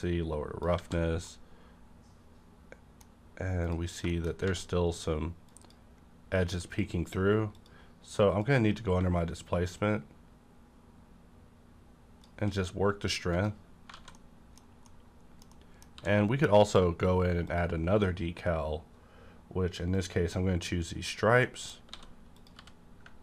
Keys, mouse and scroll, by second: 0.0 click, 0.8 a, 1.1 scroll down 1, 1.1 a, 1.3-3.2 middle drag, 3.1 scroll up 1, 3.6 click, 3.6-4.0 scroll up 1, 4.1 shift+middle click, 4.4 d, 5.5 click, 6.7 click, 9.7-12.6 shift+drag, 13.3 click, 13.3 scroll down 1, 13.9 alt+a, 14.1 middle click, 14.6-15.2 scroll down 2, 14.8 middle click, 14.9 middle click, 15.5 middle click, 15.9 d, 17.5 click, 19.9 click, 21.4 middle click, 21.9 s, 22.4 click, 22.4 s, 22.6 g.